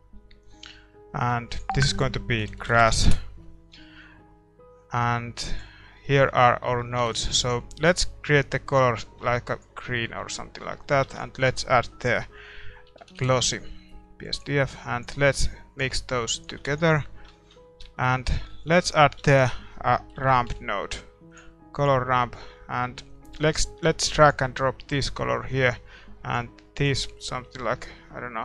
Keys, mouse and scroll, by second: 3.0 s, 8.8 ctrl+s, 8.8 middle click, 16.1-28.4 right drag.